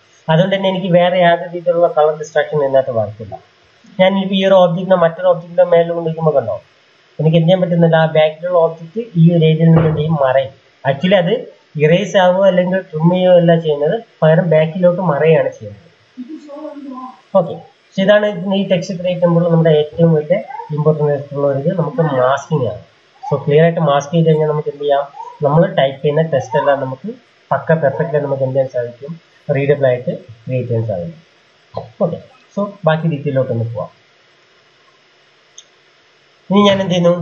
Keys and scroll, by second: 3.5 m, 8.1 Escape, 32.8 m, 36.1 Escape.